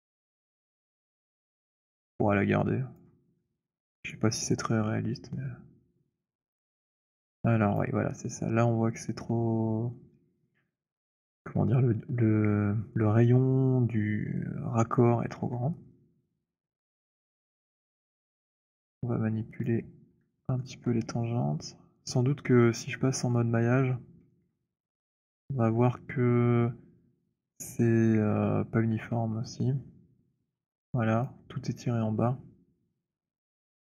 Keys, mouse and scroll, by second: 2.9 alt+click, 3.7 alt+middle click, 4.2 alt+right click, 7.6 alt+click, 15.4-15.7 alt+drag, 15.9 alt+click, 16.1-16.7 alt+drag, 17.3 click, 18.2 alt+click, 19.3 click, 20.6 alt+middle click, 28.8 4, 31.2 alt+click.